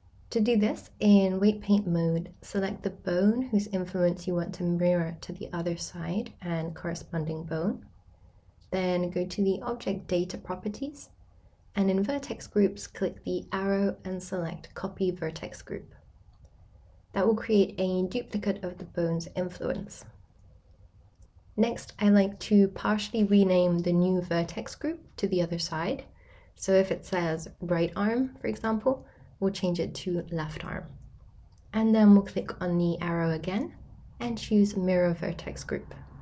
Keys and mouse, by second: 1.0 shift+middle click, 3.0-5.1 ctrl+drag, 5.7 ctrl+click, 9.8 click, 19.4-22.1 drag, 23.9 click, 24.2-32.5 drag, 27.0 BackSpace, 27.1 BackSpace, 33.7-36.2 drag.